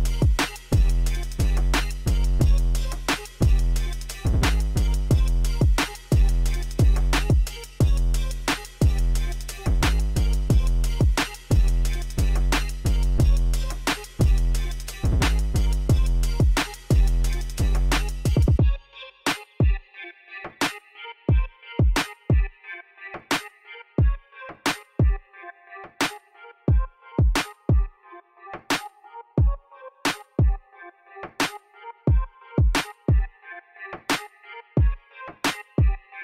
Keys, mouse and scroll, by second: 0.2-5.8 drag, 6.3 click, 7.0 click, 7.7 click, 13.9 click, 19.1 click, 20.2 click, 22.9 Escape, 23.6 click, 24.5 click.